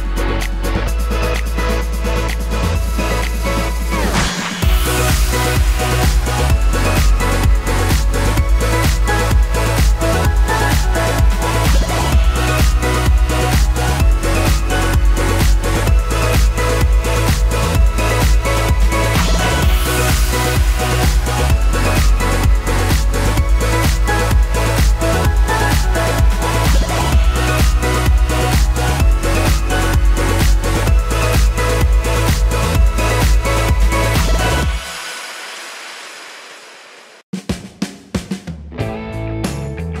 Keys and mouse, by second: 0.0-1.8 typing, 3.7 ctrl+click, 8.6 v, 9.8-13.8 middle drag, 10.5 g, 11.8 alt+s, 13.8 click, 14.0 ctrl+middle click, 14.9 ctrl+click, 15.0-18.6 middle drag, 15.9 alt+shift+s, 18.8-20.4 shift+middle drag, 19.4 k, 20.3 1, 20.4 shift+click, 20.5-21.7 middle drag, 20.8 m, 21.7 click, 22.1-24.2 middle drag, 22.1 g, 24.5-33.5 middle drag, 24.8 k, 26.4-29.2 typing, 33.4 d, 33.5-40.0 right drag, 33.9 d, 35.8 ctrl+click.